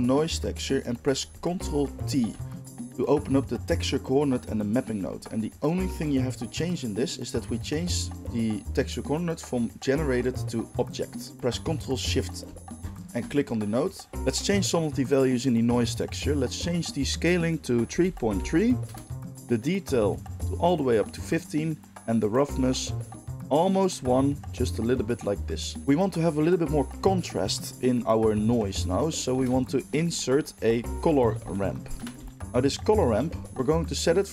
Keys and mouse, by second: 12.9-17.0 ctrl+shift+middle drag, 17.0-32.4 drag, 29.3 shift+a, 32.4-34.3 middle drag.